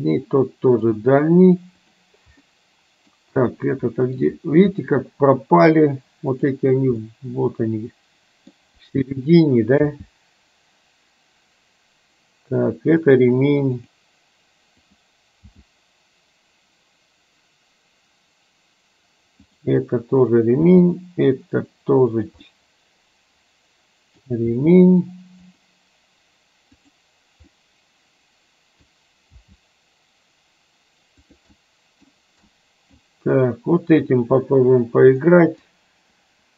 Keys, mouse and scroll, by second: 0.1 middle click, 2.5 middle click, 3.6 middle click, 4.8 middle click, 6.3 click, 7.1-8.6 middle drag, 10.0 g, 14.0 click, 14.8 click, 15.5 g, 20.7 g, 22.6-24.3 middle drag, 24.6 g, 26.8 click, 27.7-29.0 middle drag, 29.5 g, 31.6 middle click, 32.6 middle click, 35.3 middle click.